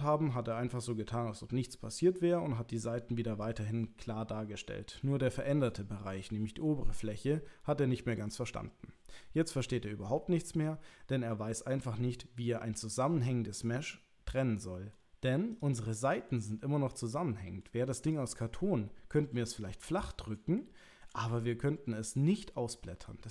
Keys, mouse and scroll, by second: 11.2-14.9 middle drag, 15.6 click, 15.8 middle click, 16.9 middle click, 18.1 click, 18.5-20.3 middle drag, 20.6 shift+middle click, 21.3-23.3 middle drag.